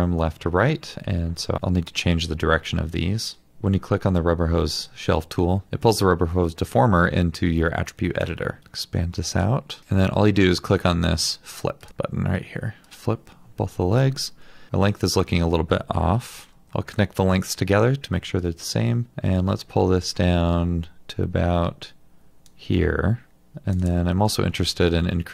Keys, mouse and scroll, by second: 8.6 double click, 16.3 ctrl+z, 23.8 double click.